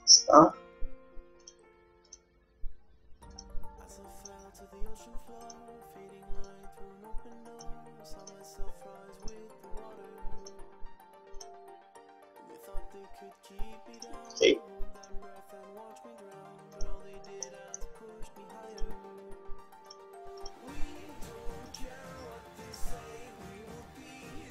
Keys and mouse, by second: 0.0 g, 2.2-3.8 drag, 2.3 g, 4.3-5.9 drag, 4.6 g, 6.5-8.1 drag, 6.8 g, 8.3-10.0 drag, 8.5 g, 10.5-12.0 drag, 10.7 g, 14.1-16.7 drag, 15.7 g, 17.6-20.4 middle drag, 18.8-20.4 drag, 19.1 g, 20.5-22.1 drag, 20.6 g, 22.8-24.4 drag, 23.5 g.